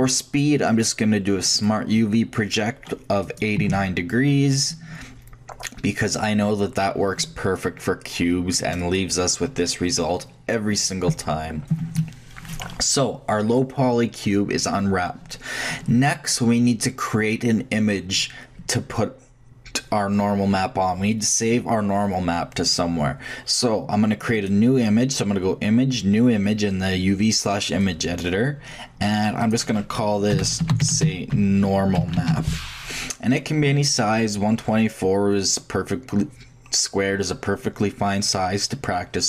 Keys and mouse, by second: 24.3-26.3 drag.